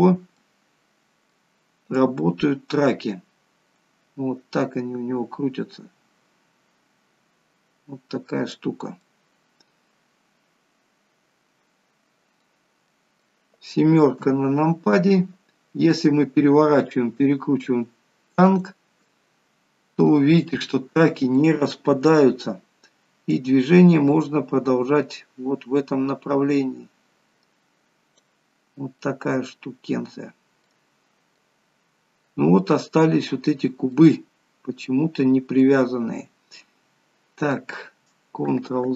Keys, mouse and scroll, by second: 1.8 scroll up 2, 2.0 click, 9.9 middle click, 13.0 middle click, 14.2 KP_7, 15.3 scroll down 3, 16.7 r, 19.1 middle click, 20.8-21.4 scroll up 3, 21.4 middle click, 23.4 click, 28.6 scroll down 1, 29.0 middle click, 29.7-30.5 scroll down 5, 30.7 middle click, 32.9-33.9 scroll up 8, 34.0 middle click, 35.8-36.5 scroll down 7, 36.8 middle click.